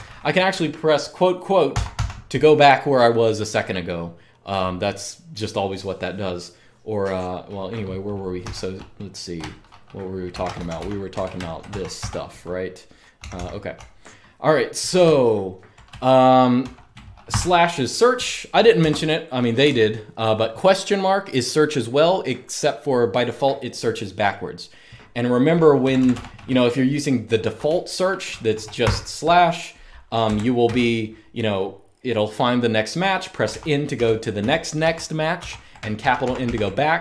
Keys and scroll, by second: 1.4 typing, 8.1 typing, 9.8-11.4 typing, 11.7 Return, 12.7-17.0 typing, 18.6 Escape, 19.4 j, 25.6 k, 25.7 k, 25.8 k, 27.4-30.5 typing, 33.2-37.0 typing.